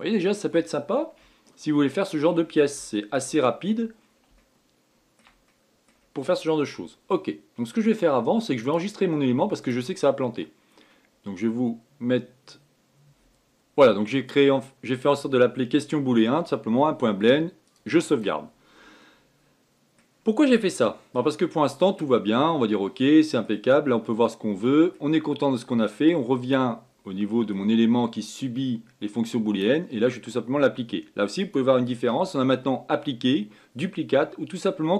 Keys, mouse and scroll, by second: 0.2-4.1 middle drag, 4.1-4.7 scroll up 6, 4.7-5.1 scroll down 4, 5.1-9.2 shift+middle drag, 9.3-12.5 drag, 19.7-27.1 middle drag, 27.1 click, 27.8-30.8 middle drag, 32.1-34.9 drag.